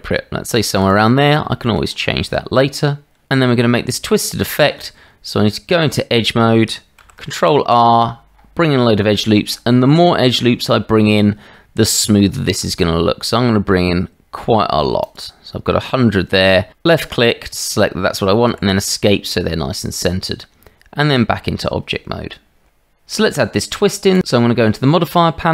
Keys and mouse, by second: 1.6 shift+middle click, 4.7 Tab, 7.0 ctrl+r, 20.5 Tab.